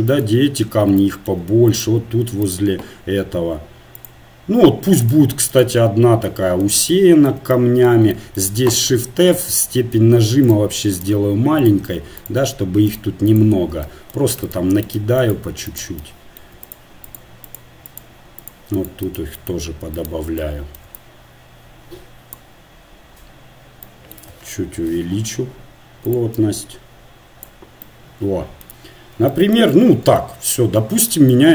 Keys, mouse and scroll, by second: 10.5 shift+f, 11.1-21.1 drag, 12.7 shift+f, 14.6-16.4 right drag, 16.8 right click, 24.9 shift+f, 27.5-31.5 drag.